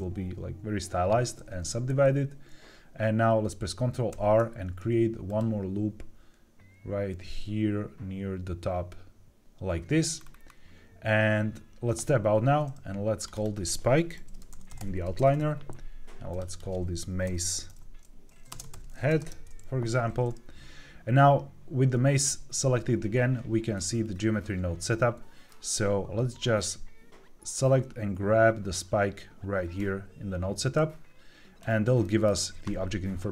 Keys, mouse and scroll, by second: 4.0 ctrl+r, 9.4 click, 10.1-11.9 scroll down 4, 11.9 Tab, 13.1 click, 13.2-14.9 drag, 16.2 click, 16.4-19.1 drag, 23.7-24.7 scroll down 5, 24.7 middle click, 27.4-28.7 drag, 30.6 click, 31.9 shift+middle click.